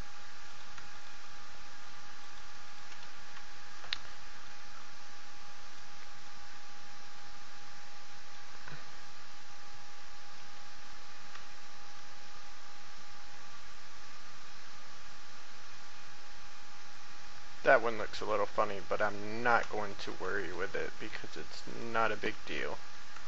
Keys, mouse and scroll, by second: 0.5 right click, 0.9 shift+right click, 2.6 shift+right click, 3.0 shift+f, 4.1 shift+middle click, 9.6 middle click, 10.9 scroll down 1, 11.4 shift+middle click, 12.1 middle click, 13.6-17.2 drag, 17.6 scroll up 1, 17.7-18.2 scroll down 1, 18.5 shift+middle click, 20.0 right click, 20.4 shift+right click, 22.2 shift+f.